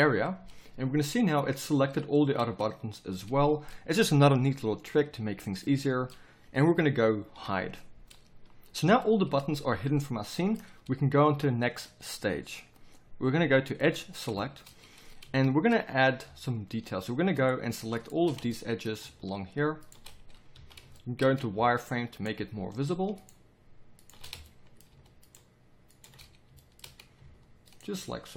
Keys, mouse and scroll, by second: 0.4-7.3 middle drag, 7.3 h, 8.8 z, 11.3 KP_7, 14.3 middle click, 15.4 middle click, 18.5 middle click, 18.7-20.5 middle drag, 20.5 z.